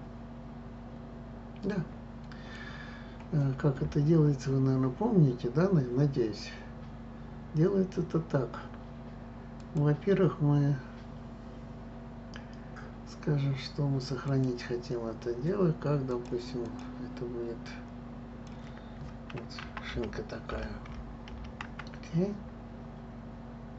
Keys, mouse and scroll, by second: 9.6-12.6 drag.